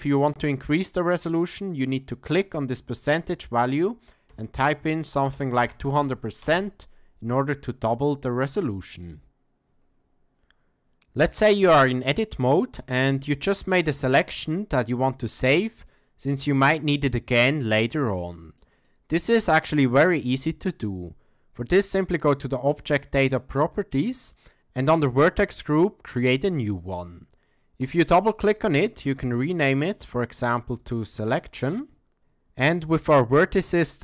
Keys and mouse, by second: 2.4-7.2 drag, 5.6 KP_0, 11.1 click, 11.5 Tab, 12.7 KP_1, 13.6 shift+drag, 14.3-15.9 drag, 16.5-18.6 middle drag, 18.9-19.2 ctrl+middle drag, 19.5-19.9 shift+middle drag, 19.9 shift+drag, 22.7 click, 24.2 click, 26.2 click, 27.8 click, 28.0-32.2 drag.